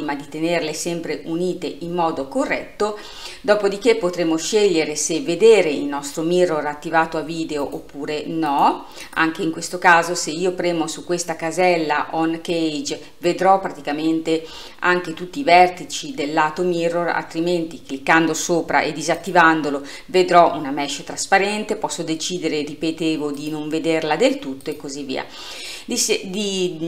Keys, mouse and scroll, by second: 7.7 click, 8.6 click, 9.1 click, 19.2 click, 23.4 click, 24.7 click.